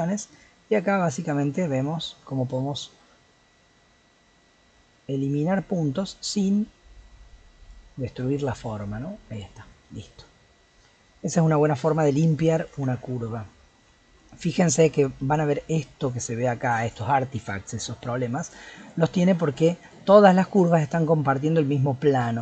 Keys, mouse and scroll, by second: 10.0-12.8 middle drag, 12.8 Tab, 13.1-15.4 middle drag, 15.4-16.9 scroll up 1, 16.9 click, 17.8 g, 18.8 click, 19.2 g, 19.8 click, 20.2 g, 20.9-22.4 middle drag.